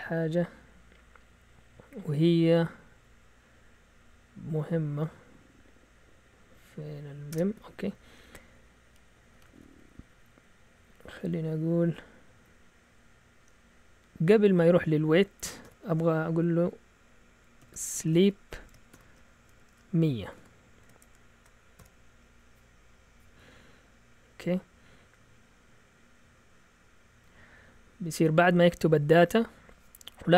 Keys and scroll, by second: 5.3 Up, 6.4 Down, 7.3 Return, 7.6 Down, 8.2 Down, 8.3 Down, 8.4 Down, 8.5 Down, 9.3 Down, 9.5 typing, 15.6 typing, 17.6-22.3 typing.